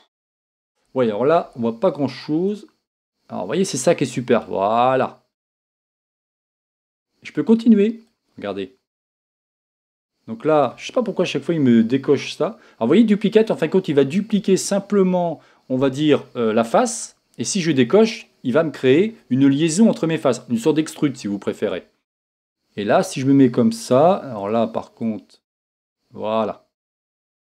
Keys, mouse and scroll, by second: 2.6-6.3 drag, 8.2 click, 18.3-22.0 drag, 23.1 click, 25.2-27.4 drag.